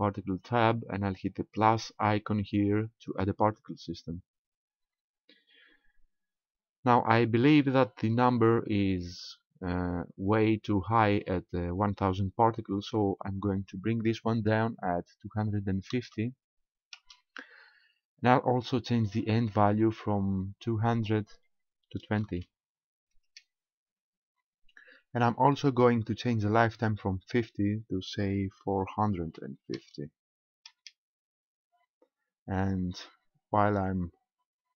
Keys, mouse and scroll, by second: 3.1 click, 13.6 click, 20.9 click, 27.3 click.